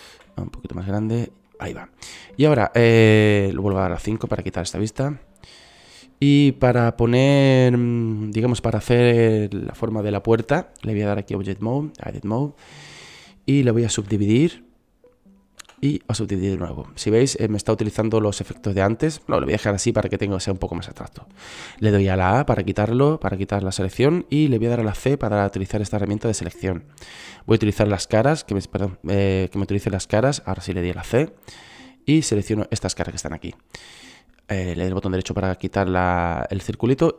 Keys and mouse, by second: 0.7 s, 2.0-3.9 drag, 4.2 KP_5, 6.4 middle click, 7.5 middle click, 14.7 w, 16.4 w, 19.7-23.1 drag, 23.1 a, 25.8 c, 32.2 c.